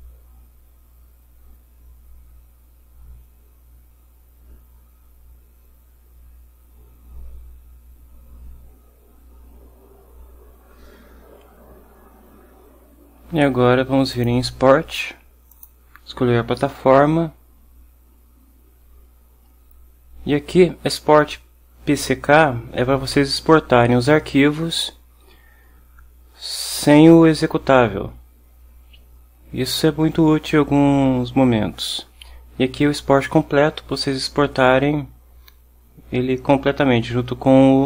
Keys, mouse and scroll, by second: 14.2 click.